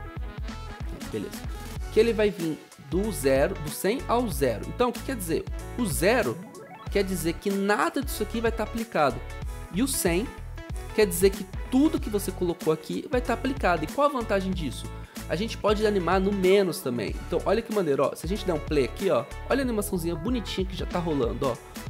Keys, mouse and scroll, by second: 0.0 ctrl+alt+Home, 19.7 o.